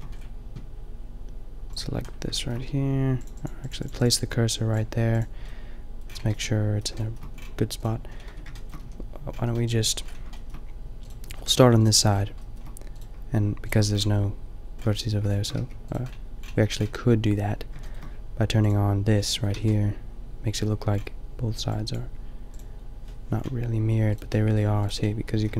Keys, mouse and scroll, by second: 2.3 middle drag, 5.6 click, 5.9 drag, 8.4 Tab, 8.9 a, 9.4 a, 9.9 middle click, 11.3 middle click, 15.6 g, 19.5 a, 24.1 middle click, 24.5-25.5 typing.